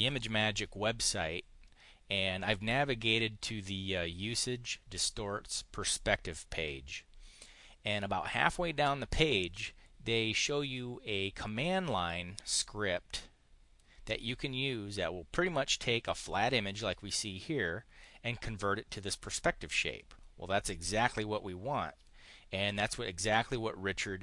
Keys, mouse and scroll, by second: 11.4-13.7 drag.